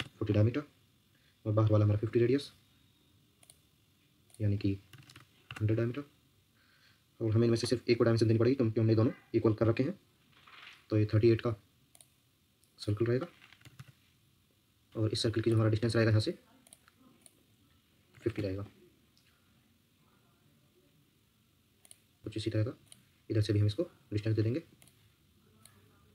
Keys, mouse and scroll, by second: 0.0-0.3 typing, 4.6-5.6 typing, 13.2-14.1 typing, 17.9-18.8 typing, 22.2 Escape, 24.7 Escape.